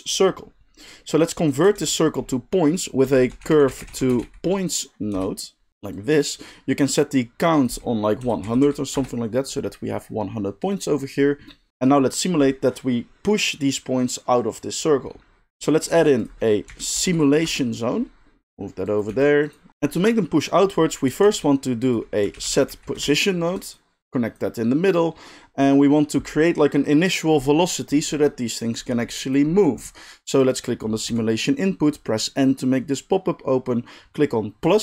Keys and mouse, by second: 1.7 shift+a, 5.7 middle drag, 5.9-11.7 drag, 8.6 0, 11.7-14.9 middle drag, 15.9 shift+a, 18.4 drag, 18.4 g, 18.8 click, 19.1 g, 19.7-23.7 drag, 21.2 shift+a, 23.7 middle drag, 24.0-29.3 drag, 29.3-30.4 middle drag, 30.4 click, 30.5-34.7 middle drag, 31.1 n, 34.7-34.8 drag.